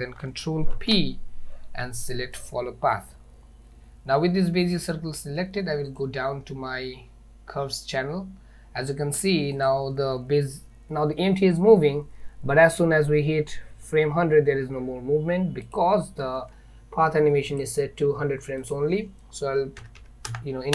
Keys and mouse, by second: 0.8 ctrl+p, 4.8 click, 9.7 click, 15.7 click, 17.5 drag, 18.7-20.7 drag.